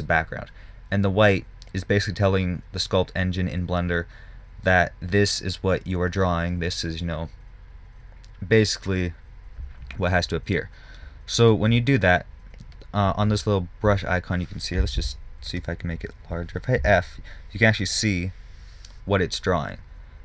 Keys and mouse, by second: 15.4 f, 17.2 f.